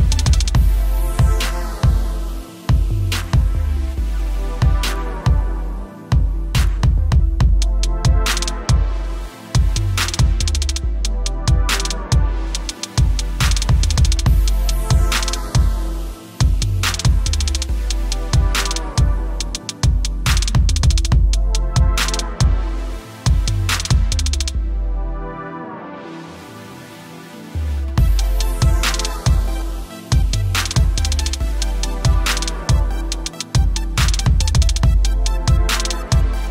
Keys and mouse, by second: 1.8 click, 7.8 click, 9.1 alt+click, 11.1-13.2 typing, 11.6 click, 13.8 ctrl+=, 14.9-15.7 typing, 17.8 click, 21.7 space, 22.0 click, 22.2 space, 24.0 click, 24.1 space, 24.6 click, 24.7 space, 26.1 click, 26.2 space, 26.3 click, 26.4 space, 28.5-28.9 typing, 31.9-33.2 typing, 33.1 click, 34.9 click, 36.4-36.5 typing.